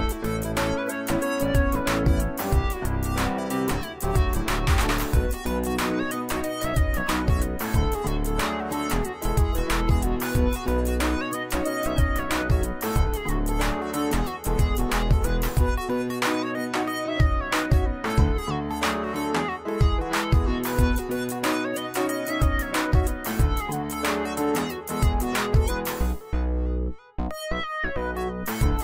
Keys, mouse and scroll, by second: 0.2-7.9 alt+drag, 9.6 space, 9.7-10.5 click, 10.2 space, 13.0-14.6 alt+drag, 15.8 space, 16.0 click, 16.4 space, 18.6-20.2 drag, 26.8 right click, 27.5 click.